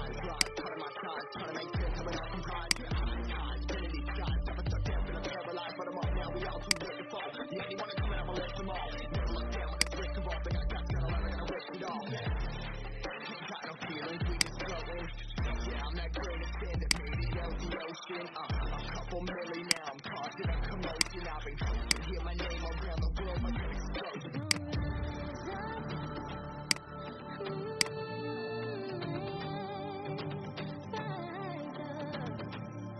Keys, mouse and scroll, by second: 0.2 alt+click, 2.7 alt+click, 6.6-8.5 drag, 12.6 ctrl+g, 14.2 shift+click, 16.8 shift+click, 18.7-19.5 alt+scroll down 1, 19.5 click, 20.1 alt+scroll down 1, 20.9 click, 22.5-22.8 alt+scroll up 1, 24.3 click.